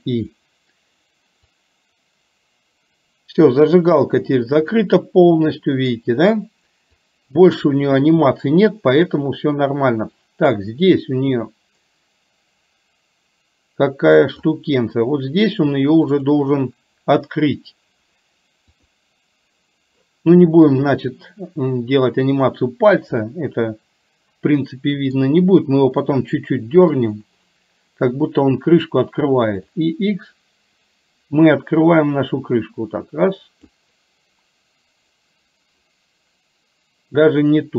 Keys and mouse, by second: 1.7-4.1 drag, 4.8-6.1 middle drag, 7.1-14.6 drag, 16.2 click, 18.8 click, 23.3-25.2 middle drag, 26.2 middle click, 29.9-33.8 drag.